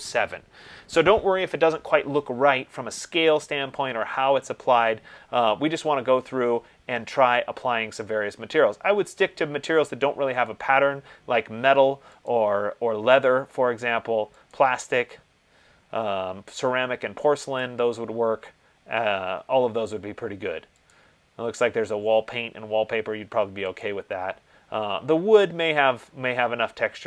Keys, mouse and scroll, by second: 12.4 click, 14.8 click, 17.8 click, 21.1 click, 24.0 click.